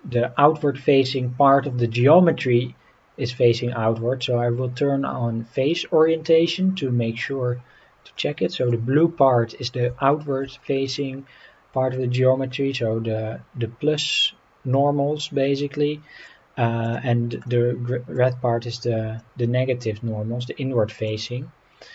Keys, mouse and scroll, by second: 8.1-8.7 middle drag, 10.1 shift+middle drag, 10.6-16.2 middle drag, 16.8 click, 17.4-18.1 middle drag, 19.2-21.1 middle drag.